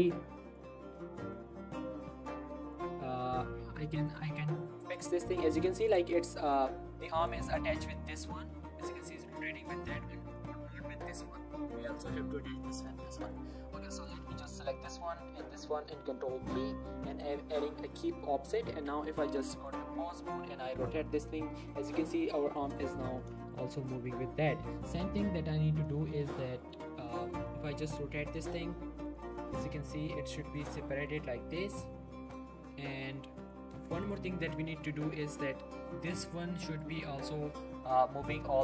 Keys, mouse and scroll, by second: 0.6 click, 0.9 r, 1.4 right click, 1.9 click, 2.1 r, 2.3 right click, 2.7 click, 3.0 r, 4.9 r, 5.1 right click, 5.3-5.8 scroll up 1, 5.8 click, 6.1 r, 6.5 right click, 6.9 click, 7.9 r, 9.6 right click, 9.9 shift+middle click, 10.3 click, 10.6 r, 11.5 right click, 12.3 Tab, 12.9 shift+middle click, 13.3 click, 16.4 ctrl+p, 17.1 click, 18.7 Tab, 19.7 click, 20.4 r, 21.8 right click, 22.7 shift+middle click, 23.9 click, 24.3-27.5 typing, 24.7 right click, 24.9 click, 25.8 right click, 26.0 shift+middle click, 26.6 right click, 27.2 right click, 28.3 right click, 28.6-32.6 typing, 29.1 right click, 29.7 right click, 30.2 right click, 30.6 click, 31.1 right click, 31.5 click, 32.3 right click, 33.4 right click, 33.8 scroll down 1, 33.9 middle click, 34.5-35.4 scroll up 1, 35.6 scroll up 1, 35.7 g, 36.8 right click, 37.4-38.6 scroll down 1.